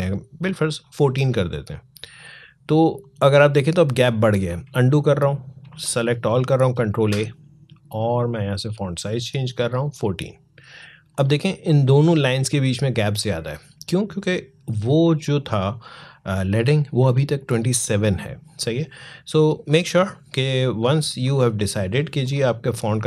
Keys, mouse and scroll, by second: 4.3 ctrl+z, 8.0 click, 18.9-20.8 drag.